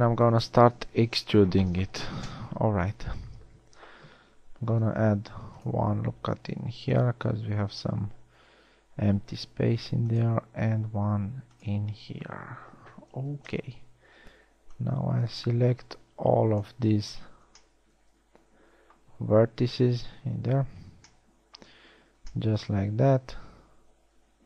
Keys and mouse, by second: 5.0 ctrl+r, 9.8 ctrl+r, 14.4 a, 14.8 b, 20.7 KP_1.